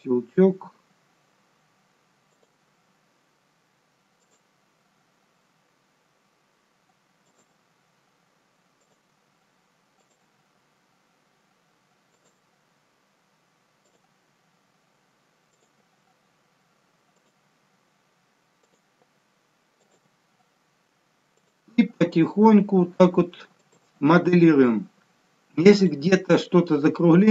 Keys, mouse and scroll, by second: 0.4 e, 2.6 e, 4.9 e, 7.5 e, 9.0 e, 10.2 e, 12.4 e, 14.0 e, 15.7 e, 17.4 e, 18.9 e, 20.1 e, 21.6 e, 24.1 e, 26.8 e.